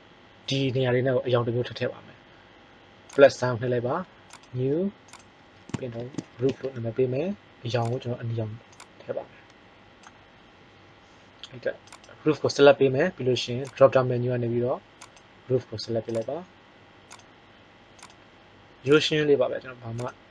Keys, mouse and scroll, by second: 3.2-7.2 drag, 6.3 o, 7.7-9.5 drag, 11.8-15.7 right drag.